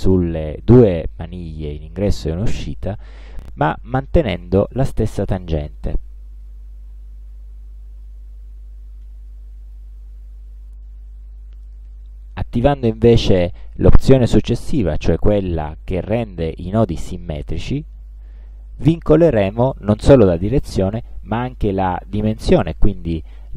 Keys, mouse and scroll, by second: 2.5-6.7 drag, 7.4 click, 9.4 click, 17.8 click, 19.8-23.5 drag.